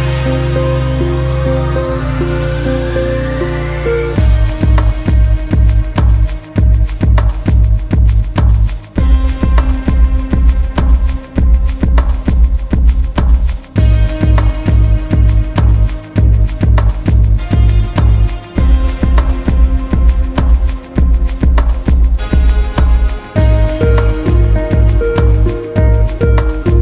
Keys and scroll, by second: 2.9 ctrl+v, 3.0 ctrl+alt+space, 3.7 ctrl+alt+space, 5.7 ctrl+space, 6.4 ctrl+alt+space, 9.0 ctrl+alt+space, 10.1 ctrl+alt+space, 11.8 ctrl+space, 13.8 ctrl+alt+space, 15.1 ctrl+space, 18.5 ctrl+alt+space, 20.0 ctrl+alt+space, 21.0 ctrl+alt+space, 22.3 ctrl+alt+space, 22.7 ctrl+alt+space, 24.1 ctrl+alt+space, 25.2 ctrl+alt+space.